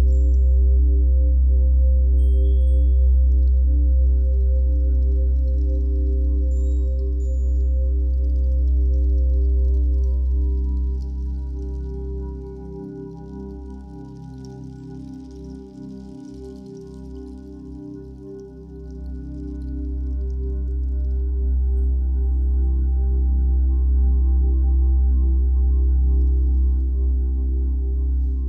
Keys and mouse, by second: 0.7 click, 1.3 space, 1.4 click, 2.5 typing, 4.5 space, 7.3-9.3 ctrl+alt+drag, 9.5 ctrl+alt+click, 10.1-11.2 alt+shift+drag, 12.3 click, 13.1-14.7 ctrl+alt+drag, 15.2 ctrl+s, 15.7 ctrl+alt+click, 16.6-23.1 drag, 24.0 ctrl+s, 28.2 click.